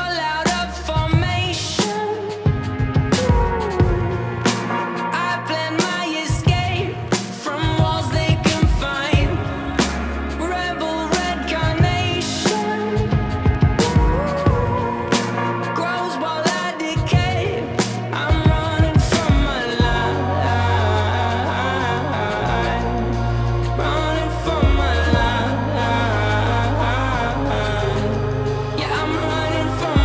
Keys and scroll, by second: 7.5 f, 12.3 w, 15.5 shift+d, 16.1 x, 17.3 x, 19.5-21.3 typing, 23.8 e, 25.9 x, 27.9 x, 28.8 s, 29.1 shift+d.